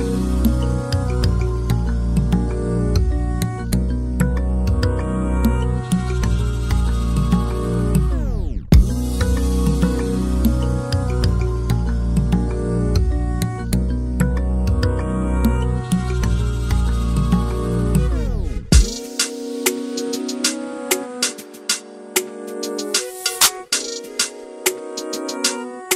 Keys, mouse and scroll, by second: 1.6 click, 1.7 scroll up 2, 1.9 click, 2.7 scroll up 3, 2.9-3.2 scroll down 1, 3.5 click, 4.4 scroll down 2, 4.7-5.2 middle drag, 5.2-6.1 drag, 6.5-8.1 drag, 9.1-10.1 drag, 11.0-12.8 drag, 13.2-13.7 middle drag, 13.7 scroll up 2, 13.8 middle drag, 14.0 scroll down 2, 14.1 middle click, 14.3-14.7 scroll up 4, 14.7 click, 15.5 scroll down 2, 15.6 alt+a, 15.7 middle click, 15.9 scroll up 2, 16.2 click, 16.4-16.7 middle drag, 17.1 click, 18.0-18.5 scroll down 8, 18.6 click, 18.9 shift+d, 19.4 scroll up 2, 19.5-20.2 middle drag, 20.2 click, 20.8 scroll down 4, 21.0 middle click, 21.3 scroll up 4, 21.4 middle drag, 21.9 click, 22.0 scroll down 1, 22.2 middle click, 22.3 click, 22.6 KP_1, 23.0 alt+a, 23.1 scroll down 1, 23.2 shift+middle click, 23.3-23.6 scroll up 2, 23.4 shift+middle click, 23.6 click, 24.5 ctrl+l, 24.7 alt+a, 24.8 click, 24.9 scroll up 1, 25.0 middle click.